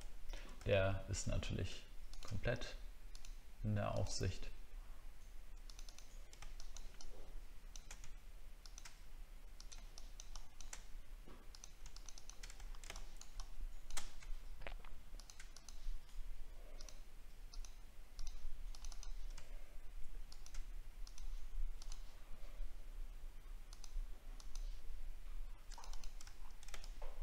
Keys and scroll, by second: 0.5 alt+scroll up 1, 12.6 alt+scroll down 1, 26.3 alt+scroll down 1.